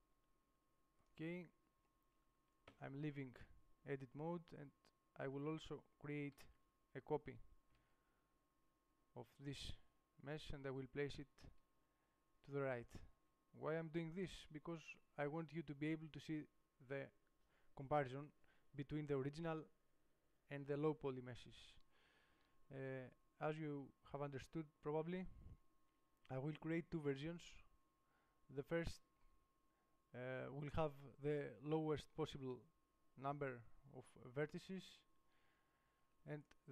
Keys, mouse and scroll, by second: 1.9-3.3 drag, 2.9 Tab, 4.6-5.6 drag, 6.4 click, 6.6 shift+d, 16.1 click, 16.7-25.3 middle drag, 27.4-30.2 drag.